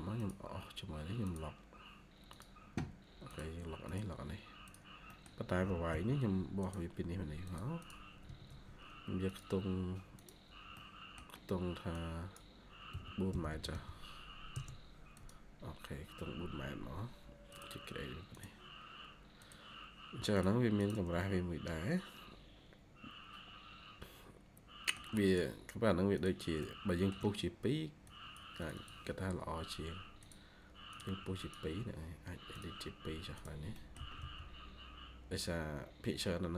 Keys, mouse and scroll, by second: 5.0 middle click, 5.5 typing, 7.7 double click, 8.1 scroll up 1, 8.2 Escape, 8.4-9.4 scroll, 10.4 scroll down 1, 10.7 middle click, 12.6-13.9 typing, 14.4 Return, 20.7 double click, 21.1 shift+middle click, 26.5 shift+middle click, 28.6 double click, 33.6-34.6 typing, 33.6 middle click.